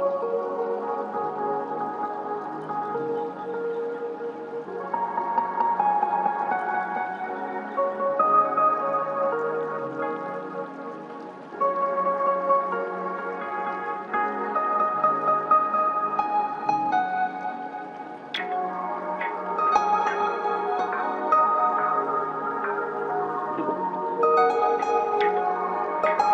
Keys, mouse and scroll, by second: 1.2-5.3 drag, 5.3 right click, 7.8 click, 9.6 ctrl+Page_Down, 11.8-15.1 drag, 15.1 scroll up 1, 16.3-22.7 drag, 22.7-26.3 drag.